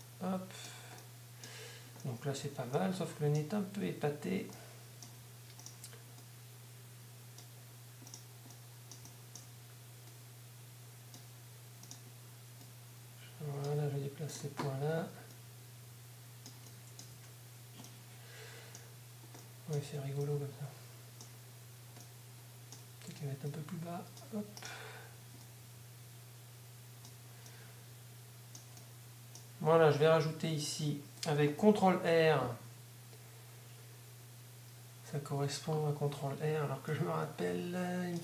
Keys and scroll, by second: 2.4 Tab, 17.1 Tab.